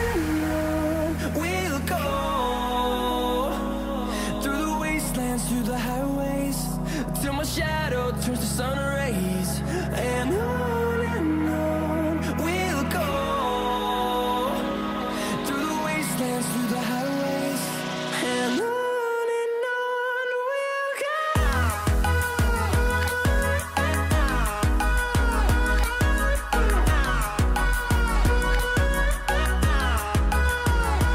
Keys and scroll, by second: 0.0-9.2 typing, 12.9 ctrl+z, 14.0 shift+z, 14.3 c, 16.1 shift+z, 17.2-23.4 typing, 19.0 ctrl+shift+z, 24.8-25.9 typing, 27.8-31.1 typing.